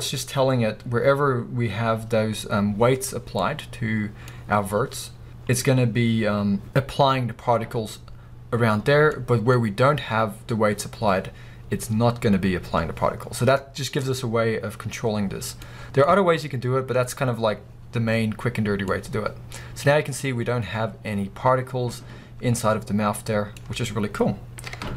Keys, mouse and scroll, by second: 3.2 scroll down 2, 3.4-24.9 middle drag, 4.4-5.1 scroll up 2, 5.1-6.2 scroll up 1, 6.2-7.5 scroll up 1, 7.5-9.1 scroll up 1, 9.1-10.8 scroll up 2, 10.8-11.6 scroll up 1, 11.6-12.4 scroll up 1, 12.4-13.3 scroll up 1, 13.3-14.1 scroll down 2, 14.1-15.6 scroll down 1, 18.6 scroll down 2, 20.2-20.8 scroll up 2, 23.6 scroll down 1, 24.7 KP_0.